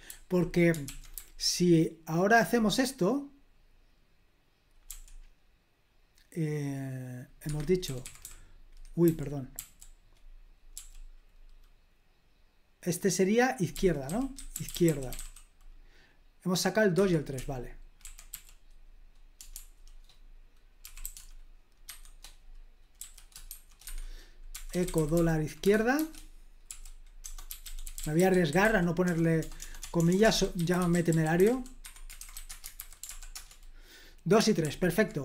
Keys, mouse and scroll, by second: 0.0 h, 0.8 super+l, 1.1 h, 1.8-2.2 h, 4.8 i, 7.4 Escape, 7.8-9.5 typing, 10.7 i, 13.4-15.6 typing, 16.9 Escape, 17.3-18.3 typing, 19.5 typing, 20.5-21.8 typing, 23.0-25.9 typing, 23.8 Escape, 27.2-32.8 typing, 33.0 ctrl+p, 33.3 Return, 34.6 super+l.